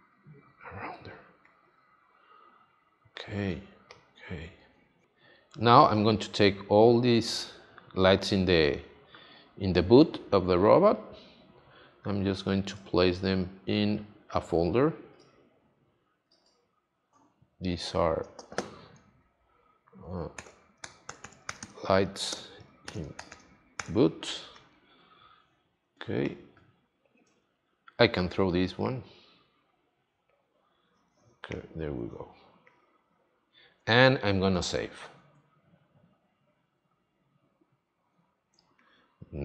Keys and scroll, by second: 3.4 space, 20.3 shift+l, 20.8 i, 22.3 space, 22.8 shift+b, 23.1 o, 32.0 space, 35.1 super+s, 38.4 space.